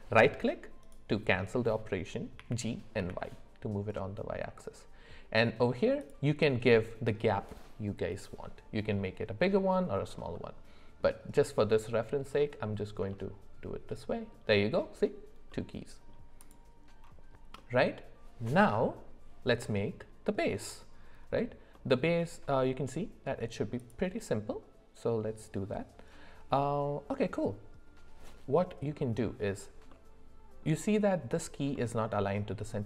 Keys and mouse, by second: 2.4 g, 10.3 middle click, 13.1-14.3 shift+middle drag, 15.5 middle click, 16.4 click, 17.6 middle click, 23.8 click, 29.9 middle click, 31.7 middle click.